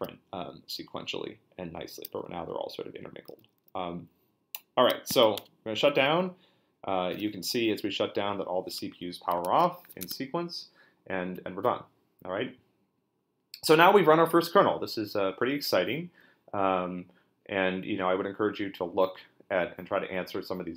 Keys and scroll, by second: 5.1 q, 5.4 Return, 10.0 super+Tab.